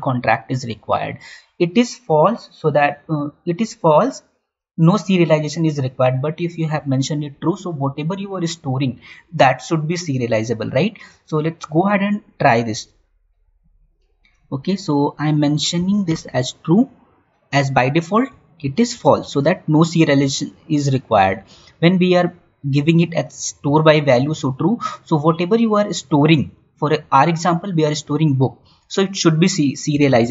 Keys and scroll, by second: 18.5 ctrl+q.